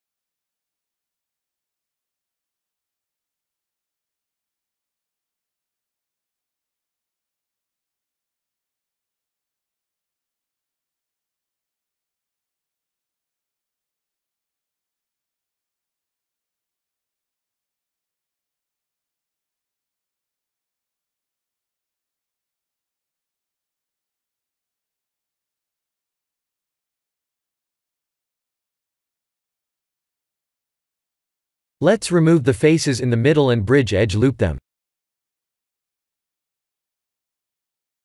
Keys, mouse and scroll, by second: 0.4 middle click, 1.2 x, 2.6 middle click, 3.4 shift+middle click, 4.0 middle click, 4.8 b, 6.3 x, 7.3 middle click, 7.5 middle click, 7.8 middle click, 8.0 Tab, 8.6 shift+z, 9.1 middle click, 10.0 shift+z, 10.3 middle click, 10.4 middle click, 10.5 middle click, 11.4 middle click, 12.0 Tab, 13.0 middle click, 13.3-13.7 middle click, 13.5 middle click, 13.6 middle click, 14.5 click, 15.1 3, 15.3 click, 15.9 shift+z, 16.4 middle click, 16.6 middle click, 18.0 shift+z, 19.0 KP_1, 20.9 shift+z, 22.0 shift+z, 22.1 shift+z, 22.6 shift+z, 23.9 ctrl+r, 26.0 r, 30.0 Tab, 30.7 middle click, 31.1 Tab, 31.5 3, 33.9 click, 34.4 shift+z, 36.0 click, 36.3 Tab, 36.6 click, 37.3 h, 37.8 Tab.